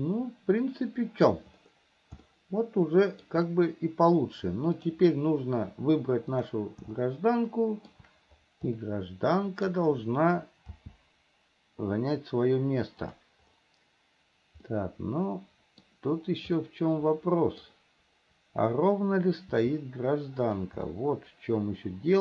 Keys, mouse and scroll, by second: 2.6-3.7 shift+middle drag, 5.0 click, 6.7 click, 7.3-8.3 shift+middle drag, 9.1 middle click, 10.8 g, 14.9-16.2 middle drag, 16.9-18.1 middle drag, 19.8 r, 21.2-22.2 middle drag.